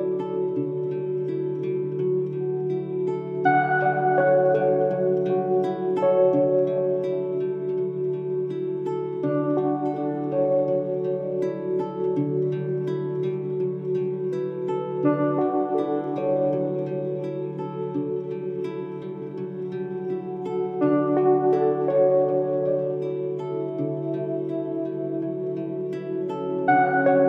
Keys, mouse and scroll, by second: 1.7 ctrl+Num_Lock, 1.7 click, 2.4 ctrl+i, 3.3 click, 4.6 click, 7.0 click, 8.1 click, 12.5 click, 16.7-23.3 drag, 23.7-27.1 drag, 27.1-27.2 drag.